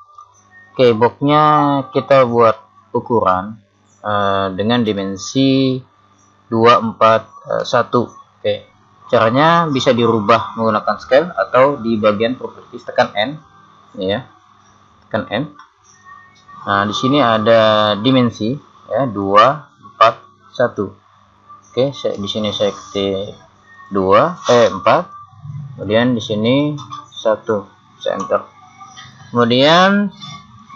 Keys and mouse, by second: 13.4 n, 14.5 n, 17.9-20.0 drag, 17.9 n, 23.7 click, 26.5 click.